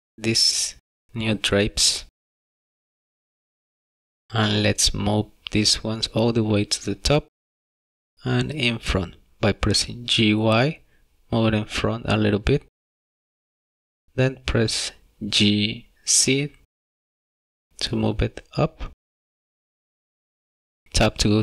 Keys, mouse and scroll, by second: 0.3 click, 0.9 click, 1.1 click, 3.9 middle click, 6.3 g, 13.5 middle click, 15.0 shift+middle click, 16.5 scroll down 1, 16.9 middle click, 17.8 g.